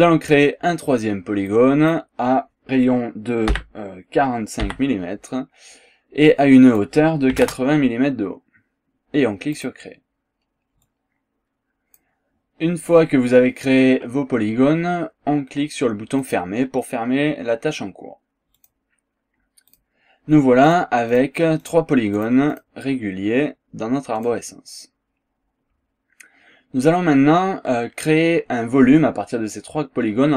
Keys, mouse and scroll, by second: 1.4 click, 3.5 KP_4, 4.6 KP_5, 6.3 click, 7.3 KP_8, 9.6 click, 10.3 scroll down 1, 10.8-12.2 drag, 16.2 click, 18.6 click, 19.7 click, 20.6 click, 21.1 click, 21.6 click, 22.2 click, 24.2 click.